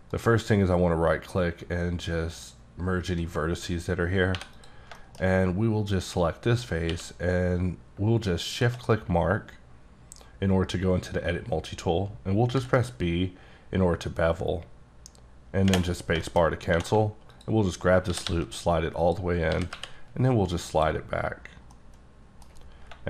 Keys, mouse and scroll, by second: 0.1 right click, 2.3 click, 3.4-4.0 scroll up 5, 4.0-4.4 scroll down 3, 4.4 3, 4.6 click, 5.0 shift+middle click, 6.9 q, 8.5 shift+click, 12.6 b, 16.2 shift+middle click, 16.4 shift+scroll up 4, 16.7 2, 17.3 alt+click, 18.1 g, 18.3 g, 19.5 g, 19.8 y, 20.7 click, 21.1-21.7 scroll down 7, 21.7 middle click, 22.6-22.9 scroll up 6.